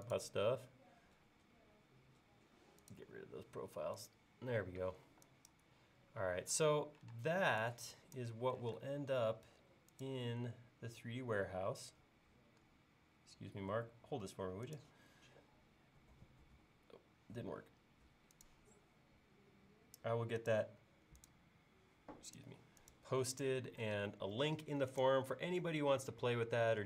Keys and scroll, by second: 5.1 e, 7.1 space, 8.6 m, 24.0 space.